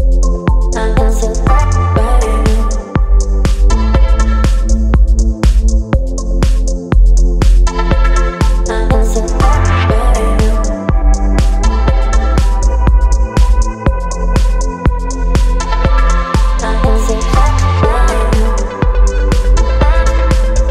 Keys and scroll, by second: 0.8 Delete, 2.3 Delete, 2.8 space, 5.7 space, 10.0 Delete, 12.1 space, 14.8 Delete, 16.8 Delete, 18.9 Delete.